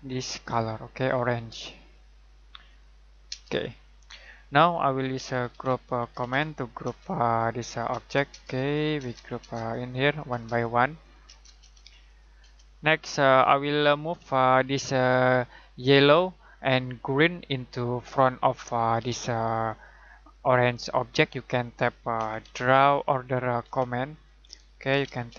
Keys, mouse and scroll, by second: 0.0 click, 3.3 space, 4.9-6.8 typing, 7.3 click, 7.9 space, 8.4 click, 9.0 space, 9.5 click, 10.3 space, 10.5 click, 11.2 space, 11.8 click, 12.4 space, 21.9-23.6 typing, 24.4 Escape, 24.8-25.3 typing.